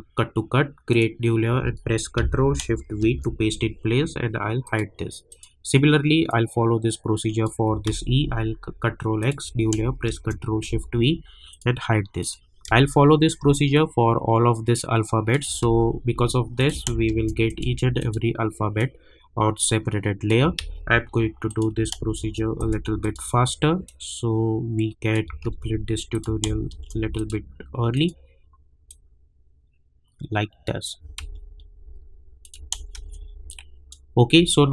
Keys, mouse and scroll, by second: 0.9 click, 3.0 ctrl+shift+v, 4.6-7.8 drag, 7.8 ctrl+x, 9.2 click, 10.2 ctrl+shift+v, 11.5 click, 12.6 space, 12.8 click, 13.1 space, 13.7-15.7 drag, 15.7 ctrl+x, 16.6 click, 17.2 ctrl+shift+v, 17.4 click, 20.6 ctrl+x, 21.5 click, 22.2 ctrl+shift+v, 22.6-25.4 drag, 25.4 ctrl+x, 26.1 click, 26.8 ctrl+shift+v, 27.1-31.1 drag, 31.1 ctrl+x, 32.4 click, 33.1 ctrl+shift+v, 33.5 click, 34.5-34.7 alt+scroll down 2.